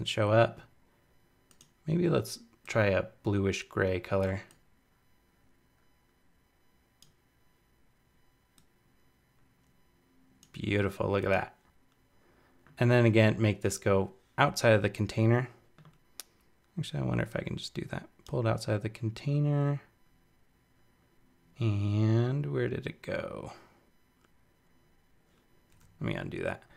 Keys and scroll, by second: 25.6 super+z.